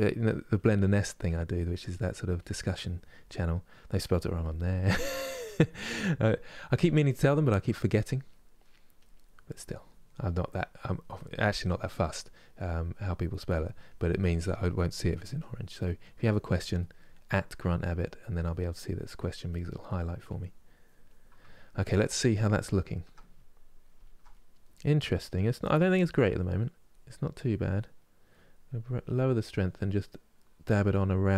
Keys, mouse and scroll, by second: 0.5 middle click, 1.0 click, 1.7 middle click, 2.1-3.4 drag, 3.4 middle click, 3.8 click, 4.6 middle click, 5.0 click, 5.7 middle click, 6.2-7.5 drag, 7.5 middle click, 8.0 click, 8.3 middle click, 8.7-9.9 drag, 9.9 middle click, 10.3 click, 11.1 middle click, 11.4 click, 11.9 middle click, 12.3 click, 13.2 middle click, 13.6-14.6 drag, 14.6 middle click, 15.1 click, 15.5 middle click, 15.9 click, 16.5 middle click, 17.0 click, 17.7 middle click, 18.0 click, 18.5 middle click, 18.9 click, 19.6 middle click, 20.0-21.5 drag, 21.5-24.5 ctrl+middle drag, 24.5-27.6 drag, 27.6-28.7 middle drag, 28.7-30.1 drag, 30.1 middle click, 30.4-31.3 drag.